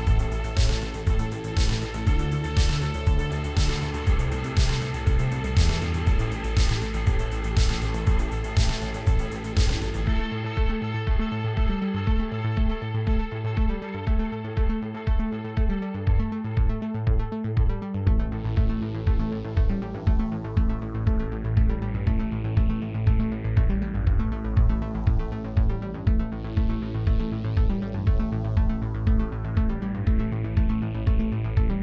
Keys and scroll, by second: 0.3 ctrl+r, 0.7 Return, 1.2 s, 3.9 a, 4.2 s, 4.3 z, 10.3 alt+a, 14.1 Tab, 18.1 g, 18.3 shift+z, 22.6 r, 22.8 z, 23.4 g, 23.6 shift+z, 25.7 r, 25.9 x, 26.6 g, 26.8 shift+z, 28.6 shift+d, 28.7 x, 29.8 r, 30.0 z.